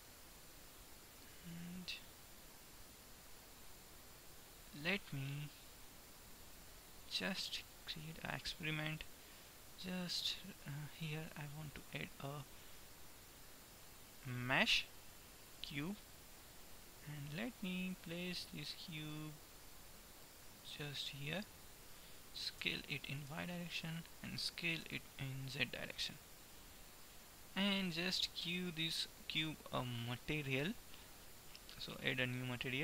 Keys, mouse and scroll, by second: 4.4 typing, 5.2-7.1 middle drag, 11.9 shift+a, 17.1-20.6 drag, 20.6 middle click, 20.7-23.2 drag, 22.7 s, 24.9 s, 27.2 middle click, 31.6-32.8 drag.